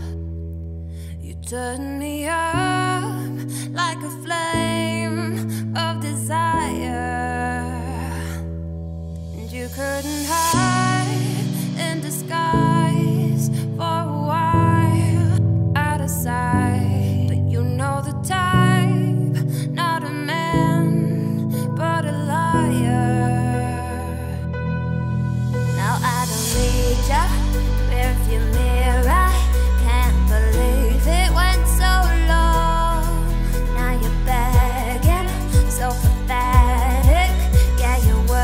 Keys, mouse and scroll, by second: 0.8 z, 1.3 click, 2.1 l, 2.5 scroll down 4, 2.7 `, 3.1-3.9 scroll up 7, 3.5 shift+middle click, 3.9 z, 4.2 g, 6.8-8.7 drag, 8.7 shift+middle click, 9.1 g, 10.4-10.7 scroll down 2, 10.7 shift+middle click, 10.9-11.6 scroll up 5, 11.6 1, 11.9 click, 12.4 g, 14.8-15.9 scroll down 3, 15.9-16.2 scroll down 1, 16.2 click, 16.3 l, 16.7-17.2 scroll up 2, 17.2 shift+d, 17.9 r, 20.4 g, 22.3-22.9 scroll up 2, 22.9 s, 25.9 z, 26.2 scroll down 2, 26.4 middle click, 26.8 Tab, 27.0-27.5 scroll up 5, 27.5 scroll down 4, 27.7-29.7 middle drag, 29.7 Tab, 31.0 l, 31.8-32.2 scroll down 2, 32.2 d, 32.3 y, 33.2 scroll up 2, 33.5 s, 36.2 Tab, 36.2 scroll down 1, 36.3-38.4 middle drag.